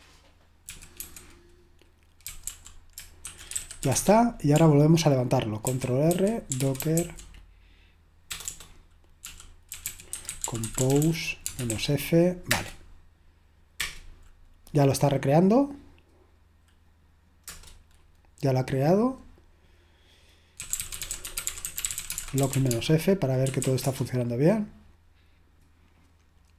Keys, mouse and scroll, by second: 0.5-4.4 typing, 14.7 typing, 25.2 typing.